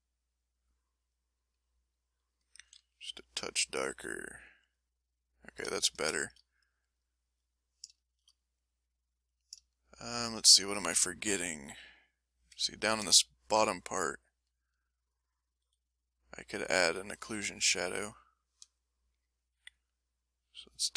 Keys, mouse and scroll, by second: 0.0 click, 1.0 click, 2.6 a, 3.0 click, 3.9 m, 4.2-6.1 drag, 6.1-9.1 ctrl+shift+middle drag, 9.1 shift+click, 9.7 shift+click, 10.1 shift+middle click, 10.5 shift+click, 11.3 shift+m, 12.7 ctrl+click, 13.8-14.9 ctrl+drag, 15.6 l, 16.0 click, 16.8 l, 17.2 middle click, 17.7 ctrl+middle click, 18.2 ctrl+middle click.